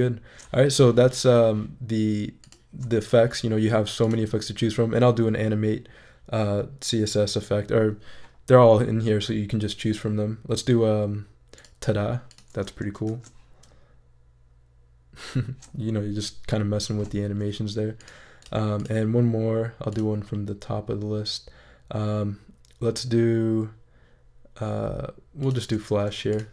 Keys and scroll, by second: 13.1 shift+super+e.